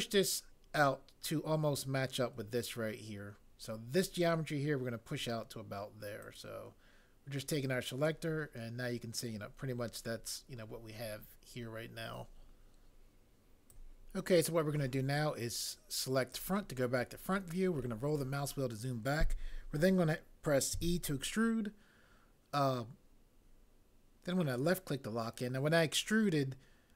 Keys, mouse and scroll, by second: 20.8 e.